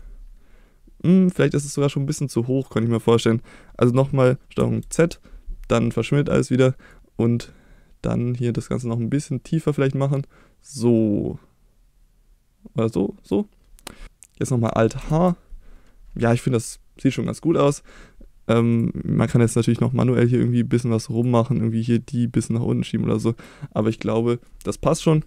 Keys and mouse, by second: 4.8 ctrl+z, 6.9-13.3 drag, 15.0 alt+h, 16.3 middle click, 18.7 click, 19.8 click, 21.2 click, 22.4-23.4 drag, 24.2 middle click.